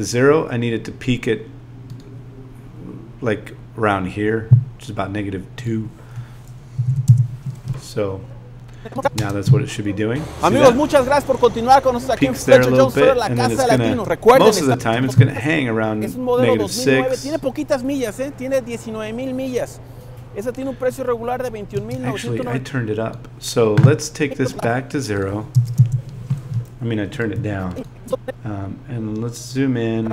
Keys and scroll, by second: 6.8 space, 9.2 space, 13.9 space, 25.5 0, 27.3 z.